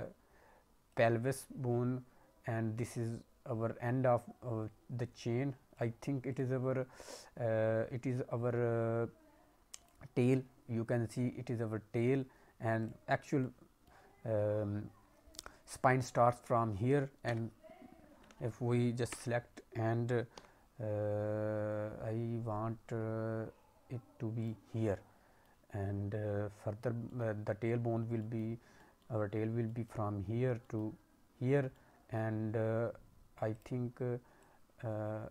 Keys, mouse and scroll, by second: 0.9 click, 5.1-5.7 scroll down 1, 5.7 click, 6.3 click, 9.7 click, 11.9 click, 12.7 click, 13.3 middle click, 16.3 scroll down 1, 17.2 s, 19.0 a, 20.3 g, 24.8 middle click, 27.0 middle click, 28.1 middle click, 28.4-28.7 scroll down 1, 28.7 middle click, 29.5 scroll down 1, 29.6 middle click, 30.5 scroll down 1, 30.6 middle click, 31.2-32.3 scroll up 4, 31.7 middle click, 32.3-33.1 scroll up 4, 33.5 click, 34.3 click.